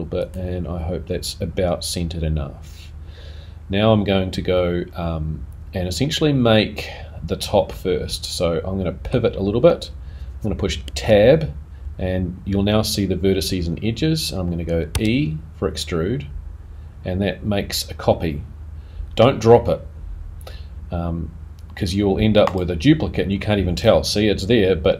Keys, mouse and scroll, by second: 7.7 middle click, 10.8 Tab.